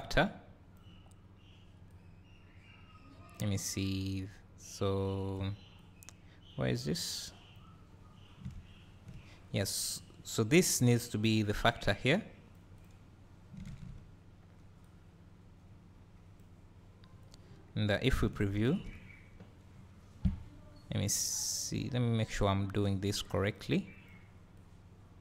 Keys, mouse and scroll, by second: 0.1 click, 1.9-4.1 drag, 5.8 click, 10.0 click, 14.8-17.3 drag, 18.4 ctrl+shift+click, 19.7 `, 24.6-25.2 drag.